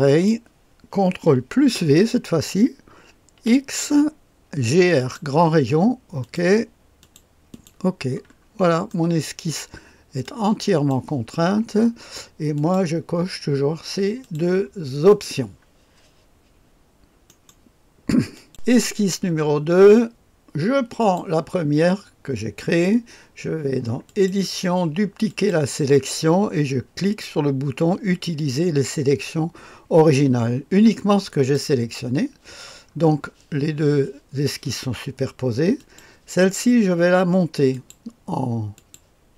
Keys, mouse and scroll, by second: 0.0-1.6 drag, 1.6 ctrl+v, 3.3 x, 4.9-6.3 drag, 7.0 click, 7.5 click, 8.8 middle click, 8.8-9.5 scroll down 1, 10.2 click, 12.5 click, 14.2 click, 15.0 click, 17.2 click, 18.3 click, 20.9 click, 24.0 click, 25.2 click, 31.3 click, 35.7 click, 37.7 click, 38.7-39.3 drag.